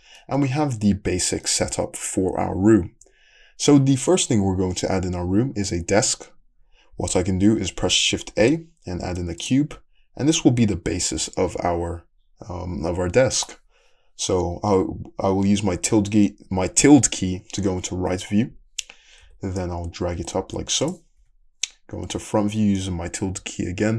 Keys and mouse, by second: 8.4 shift+a, 19.2 g, 21.2 `.